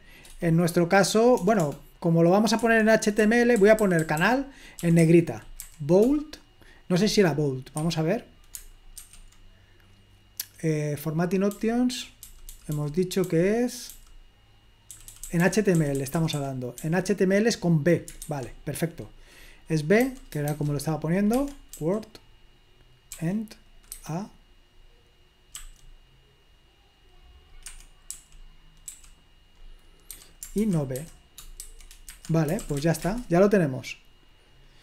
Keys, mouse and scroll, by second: 1.3 BackSpace, 1.6 BackSpace, 2.6 Escape, 3.1-5.7 typing, 7.8 Escape, 9.1 super+3, 11.5-13.9 typing, 14.9-16.7 typing, 18.3 super+1, 20.0 a, 20.5 shift+., 21.4 Escape, 21.7 w, 23.1 e, 24.0 <, 25.6 a, 27.6 Escape, 28.0 i, 28.8 i, 30.1-33.1 typing, 32.1 Escape, 33.1 Return.